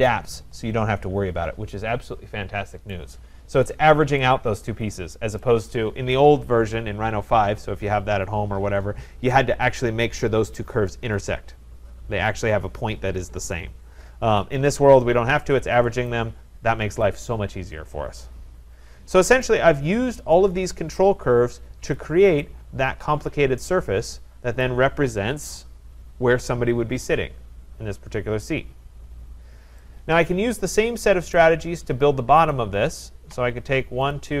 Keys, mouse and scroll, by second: 0.1-0.8 scroll, 2.9 right click, 3.6 scroll, 5.4 right click, 15.0-15.3 scroll, 16.1 right click, 17.1-17.9 scroll, 17.9 scroll, 19.4 right click, 22.0 click, 24.6 right click, 29.2-29.6 scroll, 31.3 right click, 32.5 click, 34.1 middle click, 34.1 shift+click.